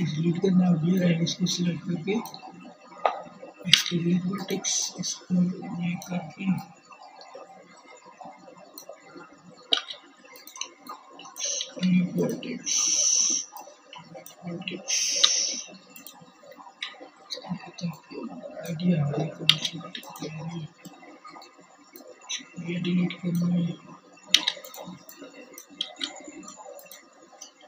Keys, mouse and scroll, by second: 1.4 x, 7.4 x, 9.3 x, 12.9 x, 14.5 KP_1, 17.1 x, 21.0-27.6 drag, 22.0 x, 23.5 x, 25.4 KP_1.